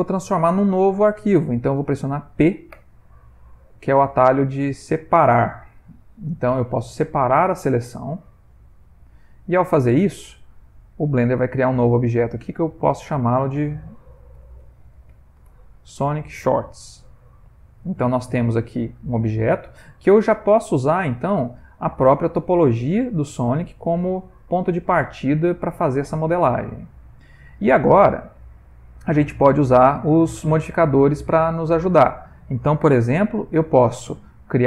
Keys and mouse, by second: 2.8 p, 12.0 click, 12.4 click, 16.7 middle click, 18.3 g, 20.9 middle click, 21.9 middle click, 28.8 click, 33.4 click.